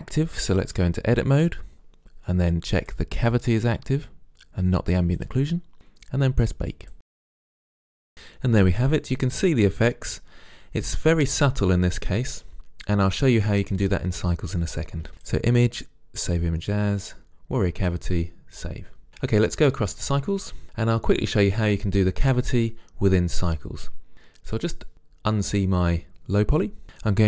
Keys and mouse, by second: 0.7 Tab, 2.9-4.5 drag, 6.7 click, 7.6 Tab, 15.2-16.4 drag, 18.9-20.6 drag, 24.6-25.9 drag.